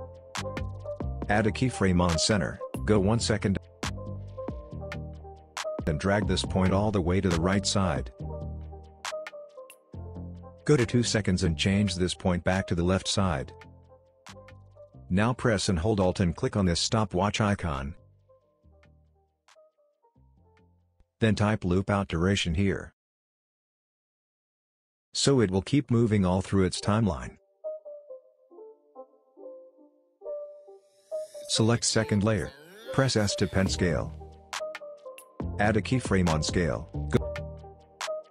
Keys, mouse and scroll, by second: 6.8 ctrl+z, 7.6-8.8 drag, 16.2 alt+click, 20.7-21.8 typing, 22.2-23.2 scroll down 1, 23.2 click, 24.4 Return, 24.7-30.9 drag, 32.5 shift+s, 36.2-38.3 drag.